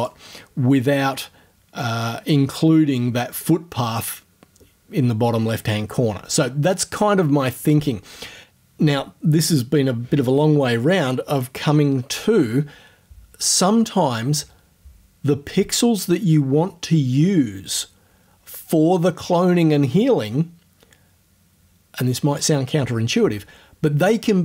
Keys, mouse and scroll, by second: 0.2 middle click, 1.8-3.6 drag.